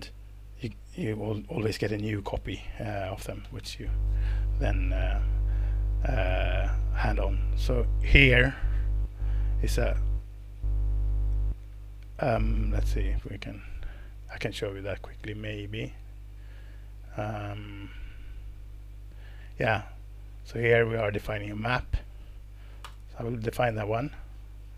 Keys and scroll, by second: 22.8 alt+Return.